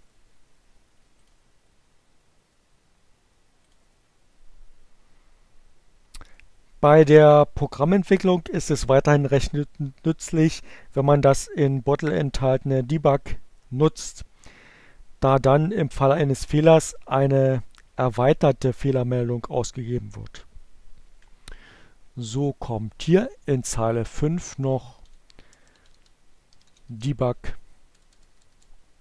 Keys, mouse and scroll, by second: 2.6 click, 21.1 click, 22.7 click, 22.9-25.6 typing, 27.6-28.5 typing.